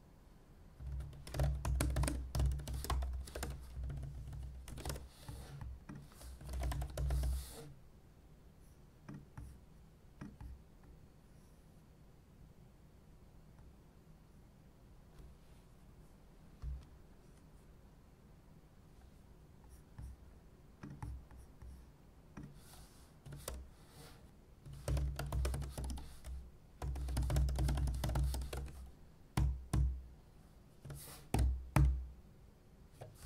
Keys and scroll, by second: 1.7-7.7 typing, 23.2-31.4 typing, 31.8 alt+super+v.